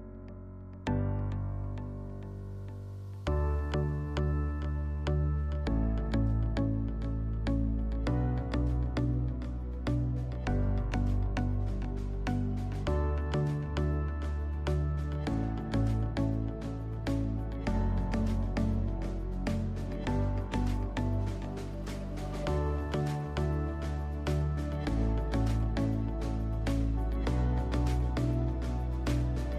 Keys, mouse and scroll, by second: 0.2 s, 1.2 click, 1.6 g, 2.8 click, 3.3 Tab, 3.6 click, 4.3 g, 5.9 click, 6.1 click, 6.7 g, 8.0 click, 8.1-8.6 scroll up 2, 18.1 middle click, 18.3 middle click, 18.4-19.0 scroll up 2, 18.8-19.9 middle drag, 19.0 e, 19.9 click, 20.2 s, 21.1 click, 21.7 e, 22.6 click, 23.2 s, 23.8 click, 24.7 e, 25.9 click, 26.2 s, 27.0 e, 28.8 click, 29.1 s.